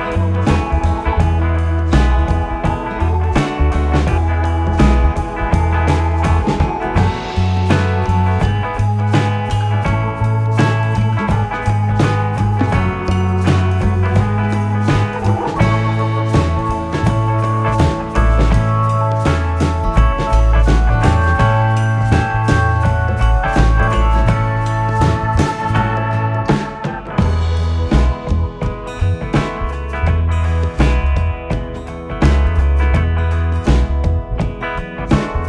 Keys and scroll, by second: 0.4 ], 2.6 g, 4.3 ctrl+z, 5.4 ctrl+z, 6.2 4, 9.3 g, 9.6 w, 9.6 Return, 10.6 4, 14.7 3, 15.0 ], 17.3 4, 17.6 3, 19.1 ., 19.8 4, 25.0 3, 27.1 3, 28.2 ], 29.3 4, 35.1 3.